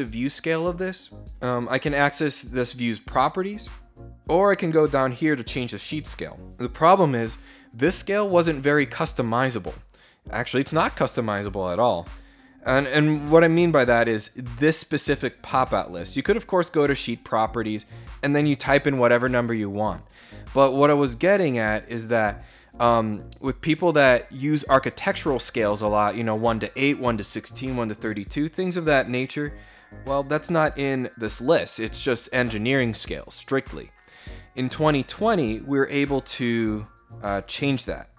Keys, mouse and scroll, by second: 5.5 click, 15.9 click, 29.2 click, 33.8 click, 35.8 click.